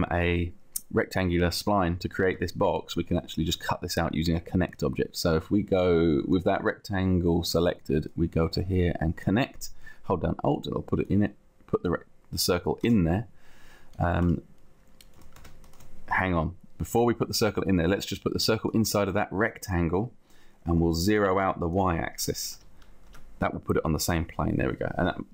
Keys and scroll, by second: 13.0 space, 14.2 space, 15.4 ctrl+z, 16.7 ctrl+z, 22.6 0, 23.2 Return, 24.4 Return.